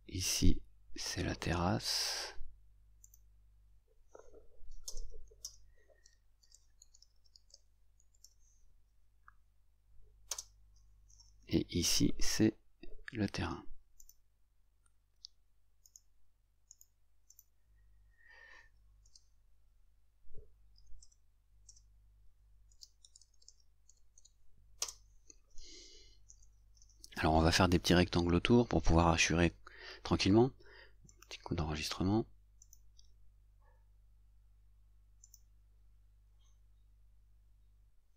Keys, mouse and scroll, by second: 3.2 click, 4.9 Return, 5.5 Return, 14.1 click, 15.9 right click, 16.8 right click, 17.4 click, 17.4 right click, 21.8 Return, 31.2 click, 32.7 click, 35.3 click, 37.5-38.1 drag.